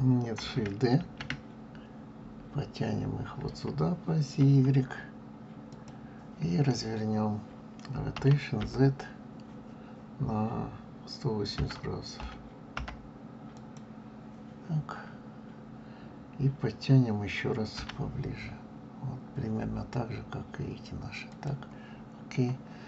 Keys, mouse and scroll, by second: 1.0 shift+d, 8.1 r, 17.7 g, 22.2-22.8 scroll up 1.